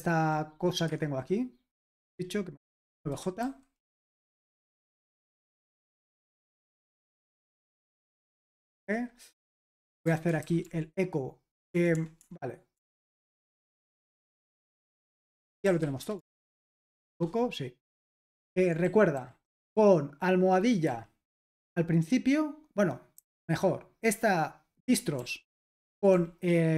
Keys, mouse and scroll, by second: 0.0-0.8 typing, 0.9 Escape, 3.2-4.7 typing, 4.2 Escape, 6.0 k, 8.3-16.3 typing, 13.4 Escape, 16.8 ctrl+p, 17.1 Return, 18.5 super+l, 18.8-20.9 typing, 23.5 j, 25.6-26.5 typing.